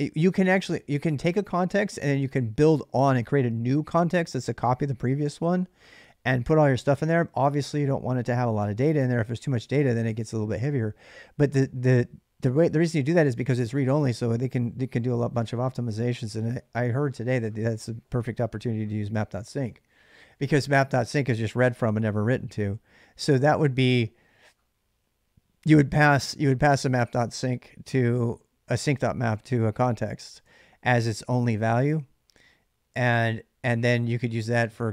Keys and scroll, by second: 23.6 k, 25.8 j, 26.9 k, 30.2 typing.